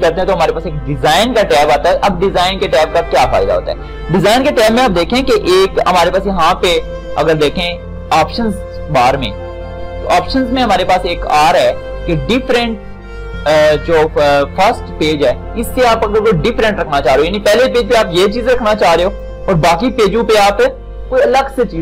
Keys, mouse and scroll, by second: 4.9 click, 6.5 ctrl+shift+d.